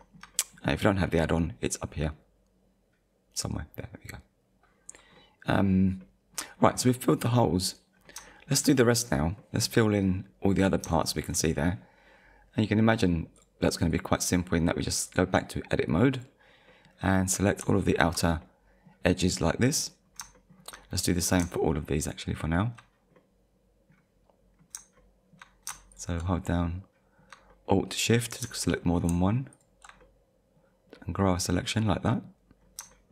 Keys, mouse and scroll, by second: 5.2 middle click, 6.0 middle click, 7.9-8.3 scroll down 2, 8.3 shift+middle click, 9.4 middle click, 10.3 scroll up 1, 11.0 shift+middle click, 11.7-12.2 scroll down 1, 13.4 click, 13.9 click, 15.1 click, 16.1 click, 16.7 middle click, 17.8 alt+click, 18.4 middle click, 19.4 middle click, 20.0-20.3 scroll down 2, 20.3 shift+middle click, 20.8 middle click, 22.0 alt+shift+click, 23.2 middle click, 24.3 scroll up 1, 25.0 shift+middle click, 25.9 alt+shift+click, 26.4 shift+middle click, 28.6 shift+middle click, 29.5 alt+shift+click, 30.0 middle click, 32.6-32.9 scroll down 2, 32.9 shift+middle click.